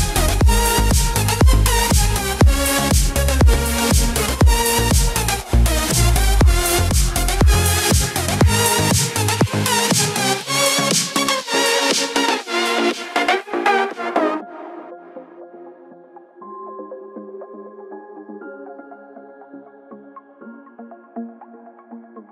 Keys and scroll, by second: 15.7 ctrl+t.